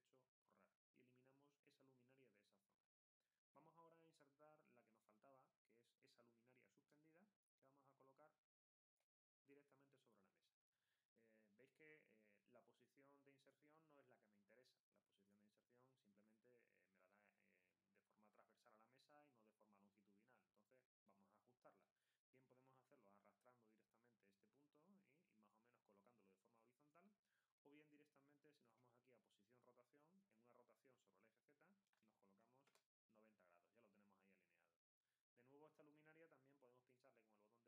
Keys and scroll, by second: 31.5-32.4 typing.